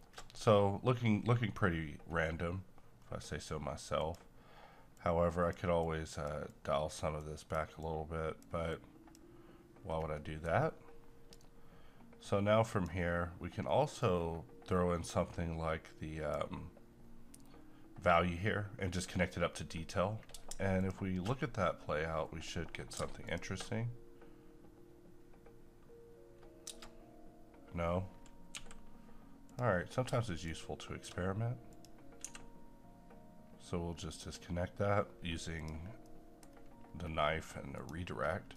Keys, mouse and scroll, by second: 3.0-3.3 scroll up 1, 4.0-9.8 drag, 9.8-10.1 scroll down 1, 10.1 middle click, 10.5-11.3 scroll up 1, 11.3-20.8 drag, 28.6 t, 29.4 click, 30.5 shift+right click, 31.7 click, 32.2 x, 34.2 click, 36.0 middle click, 36.5 scroll up 1, 37.8 click, 38.3 scroll down 1.